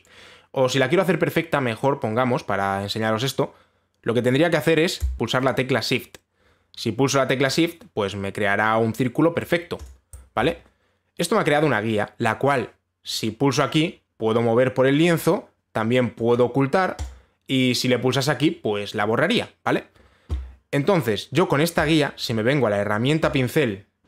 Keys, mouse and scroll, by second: 5.2 click, 10.5 shift+click, 15.8 click, 16.9 click, 17.6 click, 22.4 click.